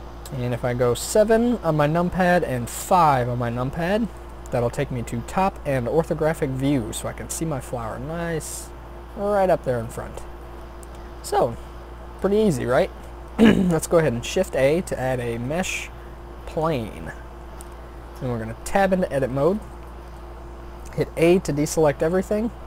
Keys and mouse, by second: 0.2 KP_7, 2.9 KP_5, 10.8-12.6 middle drag, 14.5 shift+a, 18.6 Tab, 19.7 a.